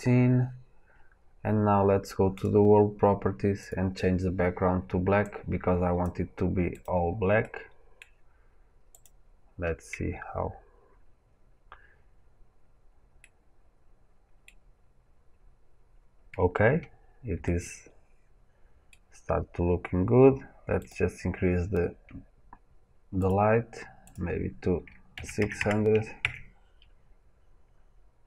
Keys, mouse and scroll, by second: 7.4-8.9 middle drag, 8.9 click, 10.2 scroll up 1, 10.8-11.4 scroll up 1, 11.4-12.3 scroll up 1, 12.3-13.1 scroll up 1, 13.1-20.7 middle drag, 19.7 scroll down 1, 20.7 click, 23.1 click, 23.9-28.2 drag, 25.5 KP_0, 26.2 KP_Enter, 27.7-28.2 scroll up 2.